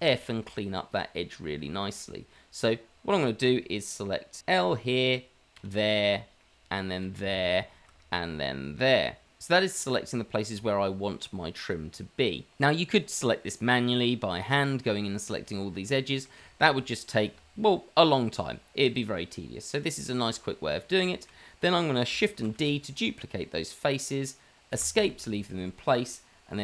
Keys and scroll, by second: 2.0 f, 4.5 l, 5.5 l, 7.0 l, 7.9 l, 9.4 l, 22.7 shift+d.